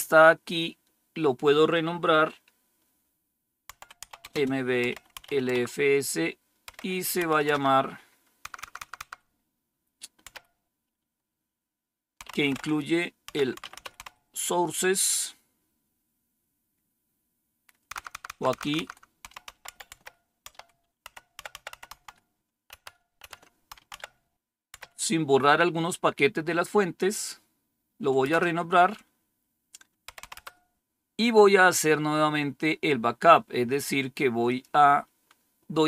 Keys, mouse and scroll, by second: 0.1-0.8 typing, 3.6-5.1 typing, 5.5 Tab, 6.4-7.1 typing, 7.4 Tab, 8.4 Left, 8.5 Left, 8.7 Left, 8.9 Left, 10.0-10.7 typing, 11.9-14.0 typing, 15.5-16.2 typing, 17.8 Left, 18.0 Left, 18.0 Left, 18.2 Left, 18.6 Left, 18.7 Left, 18.9-24.6 typing, 28.2 Return, 29.9-30.7 typing, 34.3 click.